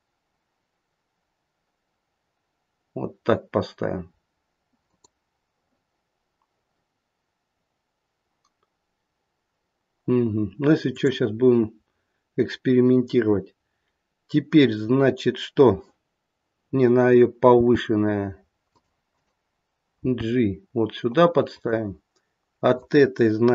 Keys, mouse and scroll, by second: 10.8 click, 17.5 g, 19.0 click, 20.0 g, 22.6 click.